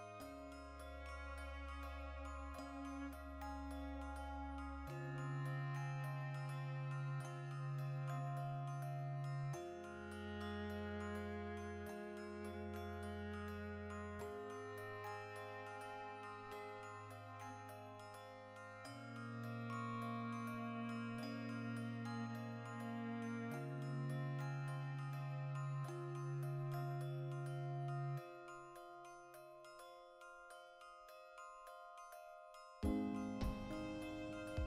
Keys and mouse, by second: 0.6 click, 1.1 e, 2.2 click, 2.5 i, 2.9 click, 3.1 i, 3.4 click, 3.5 i, 3.7 click, 4.0 x, 4.5-6.0 shift+middle drag, 5.7 2, 6.0 alt+right click, 6.4 ctrl+f, 6.8-8.5 shift+middle drag, 8.0 F9, 8.5-9.5 drag, 9.5-11.3 middle drag, 10.1 ctrl+r, 11.3 click, 11.4 ctrl+r, 11.8 right click, 11.9 ctrl+z, 12.1-14.1 ctrl+middle drag, 12.4 ctrl+r, 14.1 shift+click, 14.2 a, 14.6 shift+n, 14.8 shift+middle click, 15.8 ctrl+r, 17.4 click, 17.6 ctrl+r, 18.3 click, 18.4-22.7 ctrl+middle drag, 19.8 ctrl+r, 20.7 click, 22.5 3, 22.7 alt+right click, 23.2 ctrl+KP_Add, 24.2 ctrl+KP_Subtract, 25.6-28.1 drag, 28.1-29.7 middle drag, 29.5 Tab, 29.7 right click, 29.9-31.5 ctrl+middle drag, 30.9 x, 31.5 right click, 31.7-33.3 shift+middle drag, 33.3 right click, 33.9 m, 34.6 \.